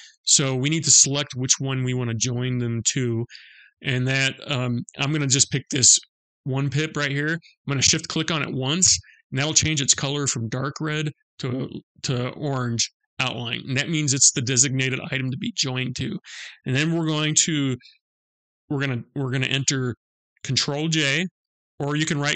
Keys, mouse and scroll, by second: 8.2 shift+click.